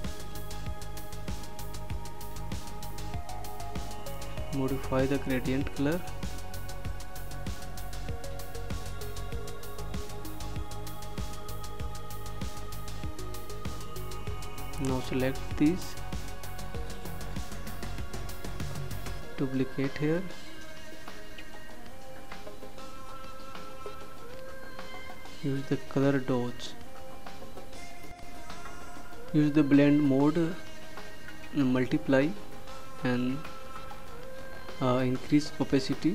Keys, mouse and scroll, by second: 7.2 click, 11.0 click, 16.8 ctrl+d, 22.5 click, 31.6 click.